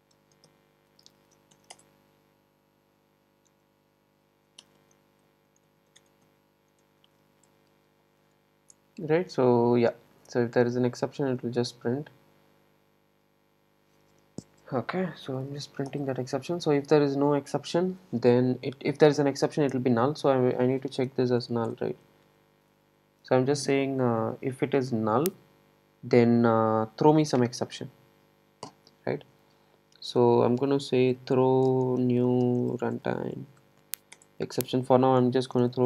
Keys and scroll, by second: 6.0 Tab, 8.3 Tab, 8.7 Escape, 15.4 super+e, 22.4 Tab, 34.3 Return.